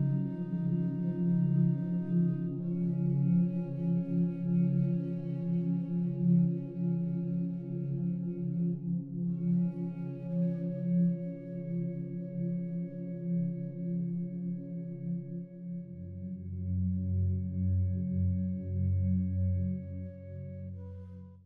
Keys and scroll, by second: 6.4 ctrl+g.